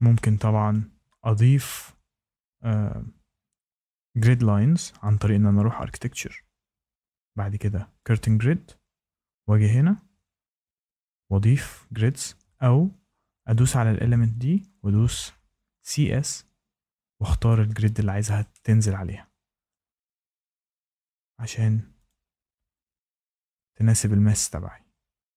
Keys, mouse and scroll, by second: 0.6 shift+middle click, 5.0 click, 8.0 click, 12.4 Escape, 13.5 click, 15.3-16.2 typing, 17.2-18.0 typing, 17.4 click, 19.6 shift+right click, 20.0 scroll down 2, 21.0 shift+right click, 22.0 click, 22.4 scroll, 23.5 shift+middle click, 25.2 Escape, 25.2 click.